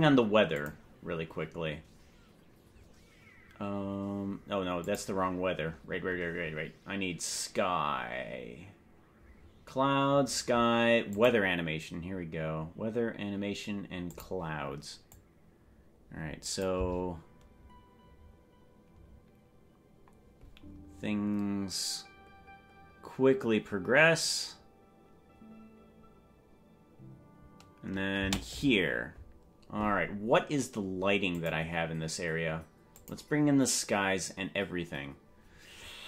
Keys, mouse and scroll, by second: 1.1 click, 5.3 click, 5.8-6.8 scroll up 15, 11.6 click, 14.6 click, 15.2-16.7 drag, 16.8 space, 28.6 space, 31.4 click, 33.5 click.